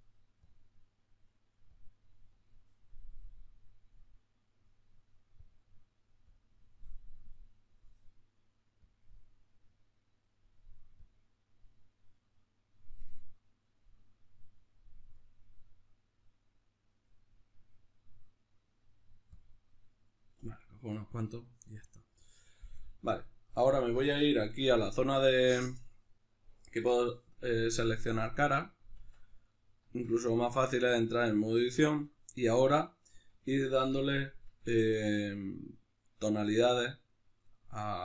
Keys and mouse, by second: 0.0 click, 22.8-24.0 middle drag, 24.0 click, 24.9-28.0 shift+middle drag, 28.0-29.1 right drag, 29.1 Tab, 29.5-38.0 middle drag.